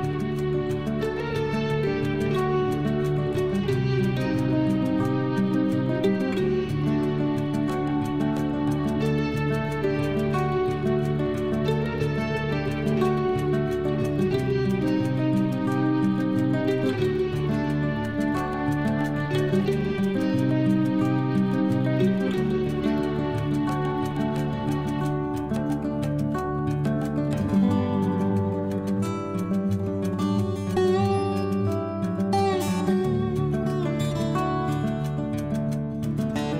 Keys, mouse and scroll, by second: 3.7 click, 6.6 click, 11.6 click, 12.4 click, 13.6 click, 14.8 click, 16.4 alt+h, 19.5 click, 20.8 click, 23.5 scroll up 1, 25.1 click, 29.6 click.